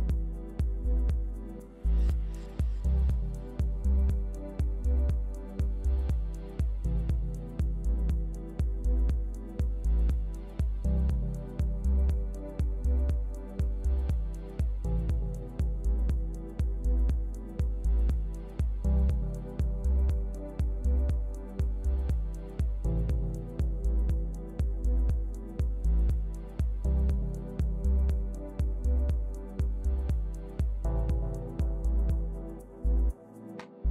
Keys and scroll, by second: 6.8 shift+Delete, 10.3 shift+super+Delete, 13.8 shift+super+Delete, 17.6 shift+super+Delete, 20.8 shift+super+Delete, 23.8 shift+super+Delete, 26.6 shift+Delete.